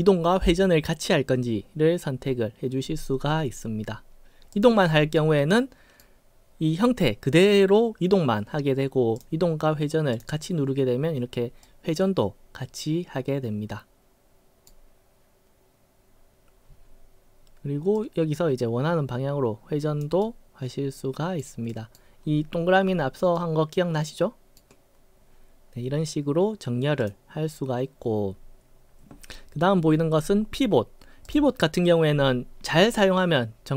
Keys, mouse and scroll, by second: 4.5 click, 5.1-6.0 right drag, 9.1 click, 10.1 click, 11.6-14.7 right drag, 18.0-20.0 drag, 20.2-21.4 right drag, 21.7 right click, 23.4-24.6 right drag, 27.0 click, 31.3 click.